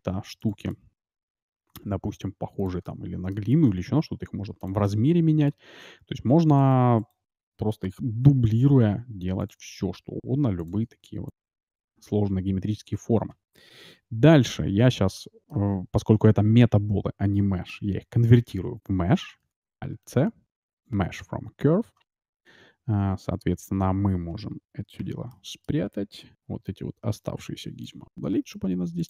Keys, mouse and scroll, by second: 0.7-2.5 middle drag, 1.7 g, 2.9-4.6 middle drag, 3.7 s, 4.8-6.6 middle drag, 6.6-8.7 right drag, 8.4 shift+d, 9.6 shift+d, 10.8 shift+d, 11.5-13.3 middle drag, 15.1-16.9 middle drag, 16.1 Tab, 16.7 Tab, 19.4 alt+c, 22.9-24.7 middle drag, 25.0 h, 25.3-26.9 middle drag, 26.3 a, 26.7 a, 27.0 b, 28.4 Delete.